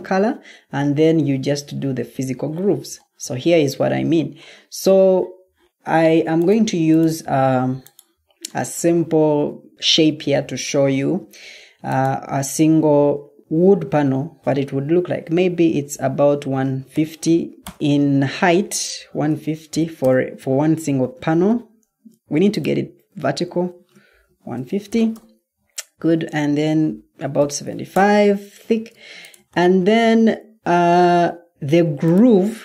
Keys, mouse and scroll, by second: 16.1-16.8 typing, 17.5 Return, 18.6-19.6 typing, 19.9 Return, 21.1 Escape, 21.8 Escape, 23.6 shift+Tab, 24.2 typing, 27.3-27.6 typing, 27.8 Return, 30.8 Escape.